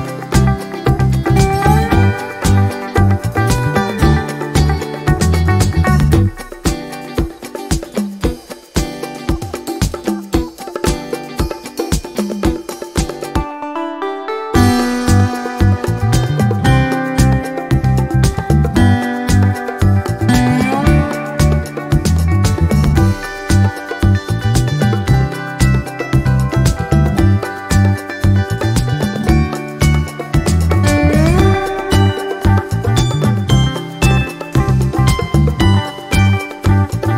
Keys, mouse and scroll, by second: 2.6 ctrl+d, 4.4-5.6 ctrl+drag, 5.7 ctrl+click, 6.9 click, 8.6 click, 9.7-10.7 ctrl+drag, 10.8 ctrl+click, 11.2 ctrl+scroll up 1, 12.0 ctrl+click, 12.9-15.0 drag, 15.2 click, 16.2 click, 16.6 ctrl+scroll down 2, 17.3-17.6 ctrl+scroll up 2, 18.0 ctrl+click, 18.5 ctrl+click, 19.4 ctrl+click, 20.4 ctrl+click, 21.8 Delete, 22.3 click, 22.8 Delete, 23.9 ctrl+z, 24.2 ctrl+click, 24.5 ctrl+click, 27.9 Delete, 32.0 click, 33.5 ctrl+d, 34.6 click, 36.1-37.1 drag.